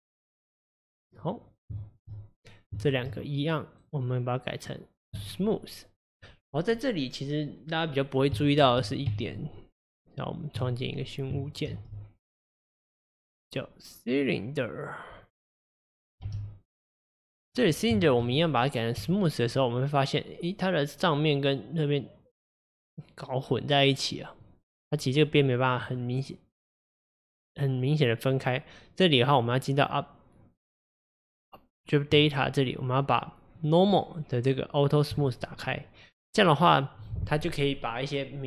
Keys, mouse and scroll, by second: 1.8-2.9 shift+middle drag, 2.9 shift+click, 3.8-6.8 right drag, 8.4-8.9 shift+middle drag, 8.9 click, 9.1 Tab, 11.0 click, 11.7 shift+a, 16.3 g, 17.6-18.0 scroll down 1, 18.0 shift+middle drag, 18.3-19.6 right drag, 19.6-22.6 middle drag, 26.0-29.1 middle drag, 32.1 click, 33.6-35.2 drag, 35.9-38.4 middle drag.